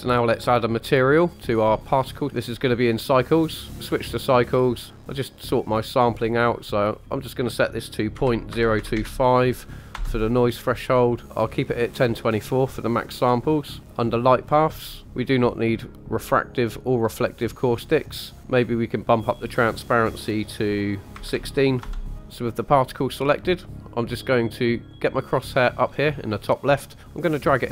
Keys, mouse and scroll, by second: 1.3-1.9 scroll down 1, 1.9 click, 1.9 scroll down 1, 2.3 scroll up 3, 2.3 click, 4.9 click, 6.9-9.9 drag, 14.0 click, 14.4-15.5 scroll down 4, 15.5 click, 16.9 click, 17.6-19.0 scroll up 3, 19.0-21.8 drag, 26.6-27.7 drag.